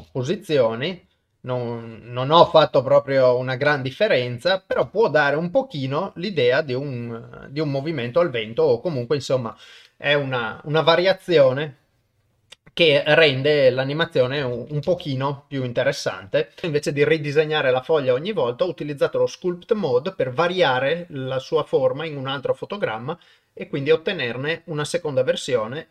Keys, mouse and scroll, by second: 0.0 shift+space, 0.2 middle click, 1.7 click, 2.5 shift+space, 4.8 shift+space, 5.1 middle click, 7.0-9.5 drag, 11.4 click, 14.4 shift+space, 14.9 shift+space, 15.8 click, 16.6 ctrl+s.